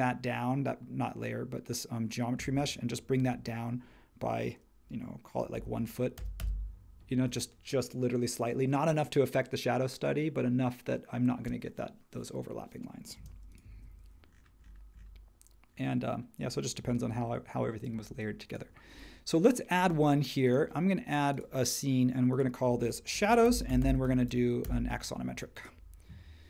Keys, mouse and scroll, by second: 5.5 1, 6.2 Return, 7.1 space, 13.1 space, 13.7 super+1, 16.8 h, 18.1 space, 23.0-25.3 typing, 24.6 Return.